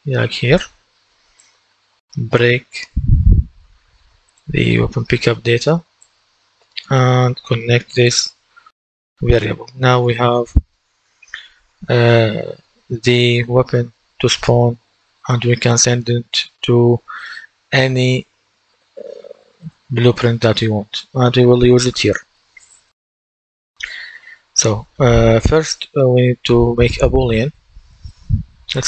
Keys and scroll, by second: 2.6-3.7 typing.